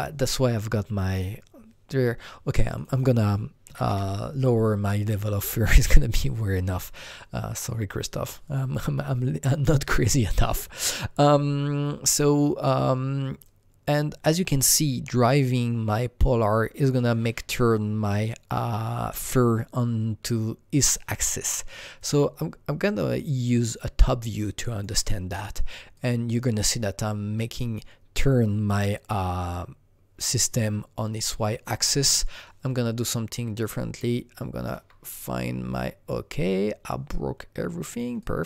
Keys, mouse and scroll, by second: 2.7 click, 3.6 KP_5, 3.9 Return, 6.7 Return, 6.7 double click, 6.7 KP_5, 6.7 scroll down 3, 13.4-22.0 drag, 13.4 scroll down 1, 22.0-38.4 alt+drag.